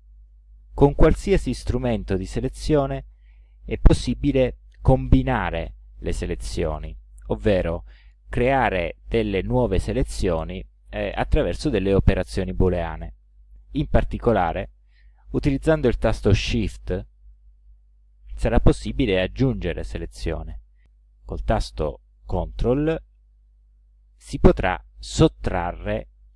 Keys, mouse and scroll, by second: 6.4-7.9 middle drag, 15.0 click, 17.4-18.5 shift+drag, 22.1 click, 23.5-24.6 ctrl+drag.